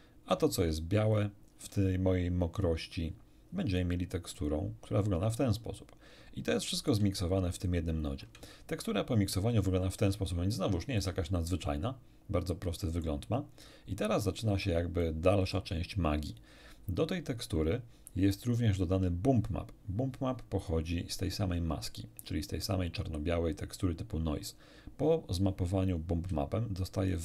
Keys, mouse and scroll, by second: 1.1 ctrl+shift+click, 4.3 ctrl+shift+click, 6.5 ctrl+shift+middle click, 7.5 ctrl+shift+click, 10.0 scroll down 2, 11.0-13.2 shift+middle drag, 13.6 shift+middle click, 13.6 shift+scroll up 2, 15.0 ctrl+shift+middle click, 20.6 ctrl+shift+click, 27.1 ctrl+shift+click.